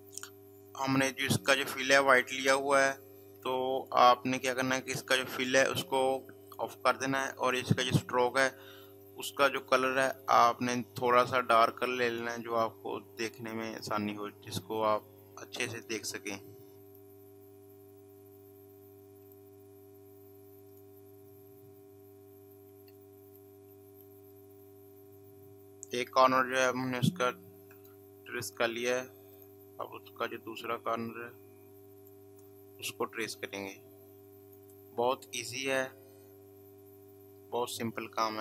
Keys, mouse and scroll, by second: 3.7 click, 6.5 click, 10.0 click, 16.9 click, 19.2 click, 22.8 space, 23.0 click, 23.3 space, 23.8 space, 27.7 click, 32.0 click, 34.4 click, 37.6 click.